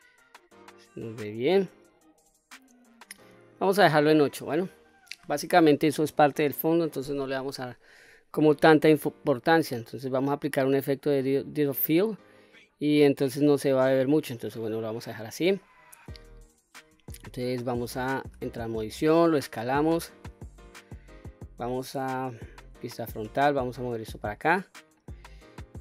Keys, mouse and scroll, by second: 14.7 click, 15.3-16.0 middle drag, 17.9 Tab, 19.0 s, 20.9 click, 21.8 KP_1, 23.0-24.5 drag, 25.3-25.8 drag.